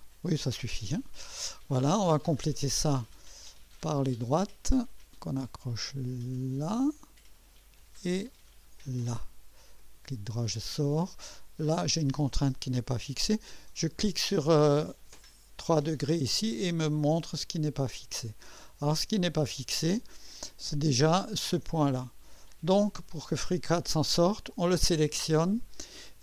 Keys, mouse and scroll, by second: 2.6 click, 4.3 click, 5.2-5.9 typing, 6.8 click, 8.8 click, 9.8-10.5 typing, 9.8 right click, 10.8 scroll up 1, 11.4 right click, 13.6-14.4 typing, 13.9 right click, 15.6 click, 17.7-18.2 scroll down 1, 18.6-19.3 typing, 18.6-19.3 right drag, 20.6 click, 23.0 click.